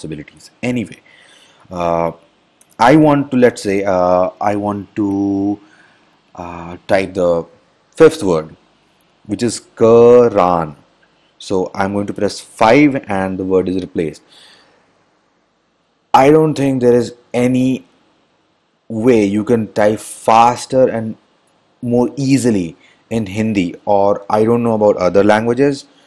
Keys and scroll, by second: 12.9 5.